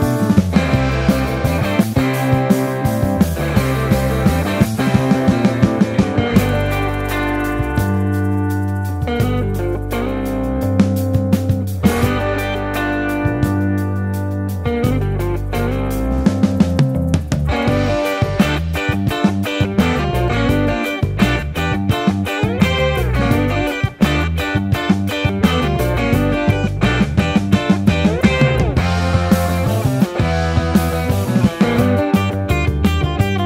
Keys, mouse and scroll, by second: 0.8 ctrl+z, 8.5 Tab, 9.7 ctrl+l, 20.8 ctrl+l, 23.6-26.2 drag, 26.2 Tab, 28.7 ctrl+z, 30.0 ctrl+KP_Add, 31.1 ctrl+KP_Subtract.